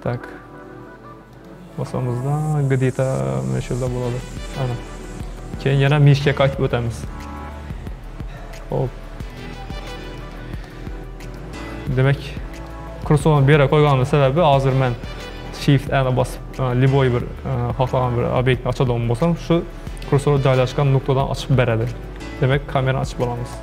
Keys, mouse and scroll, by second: 1.4-4.3 drag, 7.0-9.4 drag, 9.8-10.4 middle drag, 10.4 scroll up 2, 10.7-12.5 middle drag, 12.5 scroll up 1, 12.7-15.5 shift+middle drag, 15.5 shift+a, 22.0 shift+a.